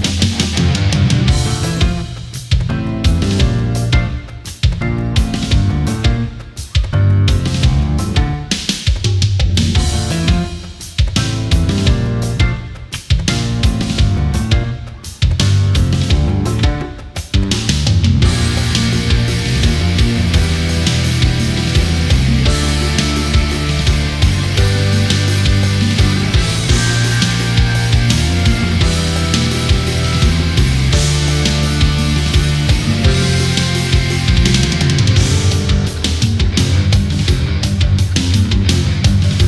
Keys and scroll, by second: 9.5 ctrl+z, 10.2 ctrl+z, 13.6 space, 15.8 ctrl+=, 16.1 space, 20.6 ctrl+z, 29.1 ctrl+z, 30.2 Down, 30.4 Up.